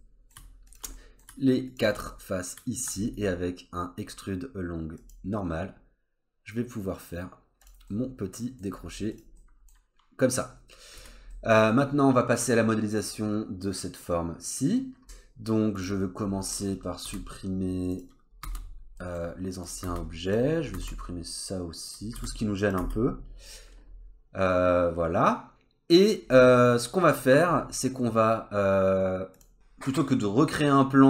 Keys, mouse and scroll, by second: 0.7 shift+click, 0.9 middle click, 1.7 shift+click, 2.1 middle click, 3.1 right click, 7.9 middle click, 8.6-9.1 scroll down 2, 9.1 click, 9.4 middle click, 10.5 scroll down 1, 11.0 Tab, 11.3 middle click, 15.7 click, 16.9 middle click, 17.1 Delete, 17.9 click, 18.4 Delete, 19.0 middle click, 19.6 click, 19.8 Delete, 20.3 click, 20.6 scroll up 2, 20.8 Delete, 21.9 click, 22.1 Delete, 22.6 click, 22.8 Delete, 23.1-23.5 scroll down 2, 23.5 middle click, 26.2-27.5 scroll up 1, 27.5 scroll down 2, 29.3 click, 29.5-30.3 scroll up 1.